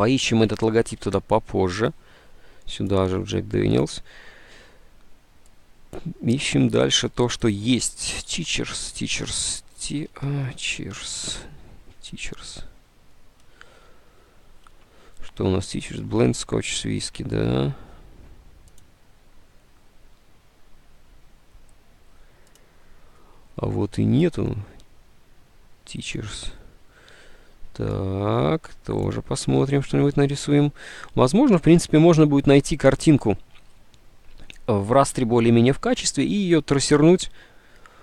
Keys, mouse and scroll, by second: 0.6 alt+Tab, 8.4 alt+Tab, 9.4-11.5 typing, 14.7 alt+Tab, 16.3 Tab, 26.7 alt+Tab.